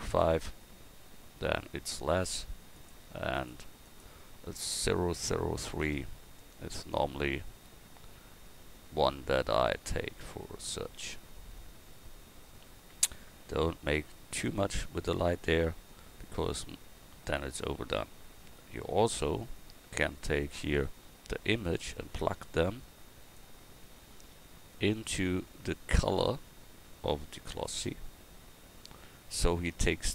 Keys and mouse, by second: 2.8-6.9 drag, 23.4-27.7 drag.